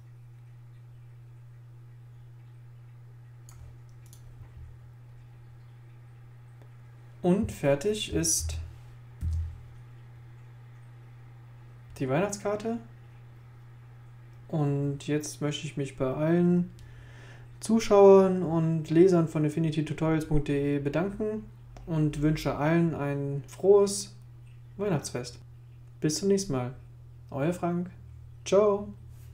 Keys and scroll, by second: 8.4 super+0, 9.2 super+1.